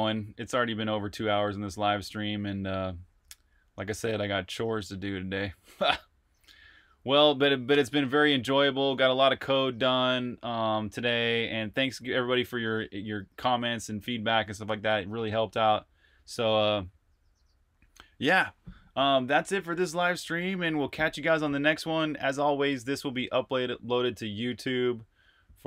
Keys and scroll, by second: 9.1 super+Tab.